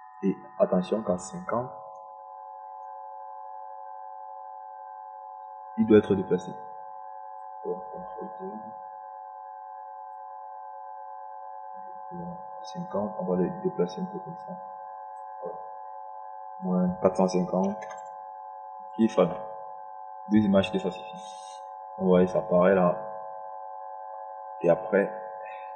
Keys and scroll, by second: 11.0 ctrl+z, 19.7 KP_5, 20.0 0.